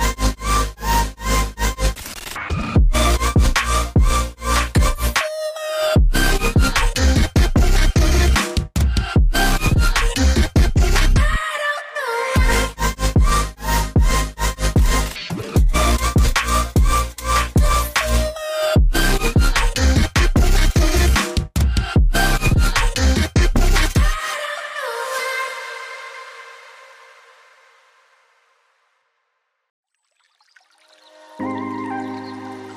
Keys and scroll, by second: 6.1 0, 6.6 Tab, 7.6 Tab, 7.8 Tab, 8.1 Tab, 10.3 shift+Tab, 11.2 shift+Tab, 11.4 shift+Tab, 11.4 Right, 13.2-13.7 typing, 14.4 Tab, 18.5 Return, 20.2 Escape, 22.4 Return, 22.4 Escape.